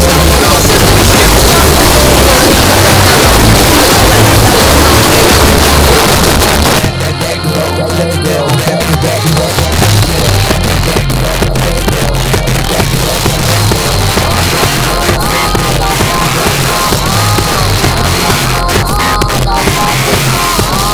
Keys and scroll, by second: 6.0 Page_Down.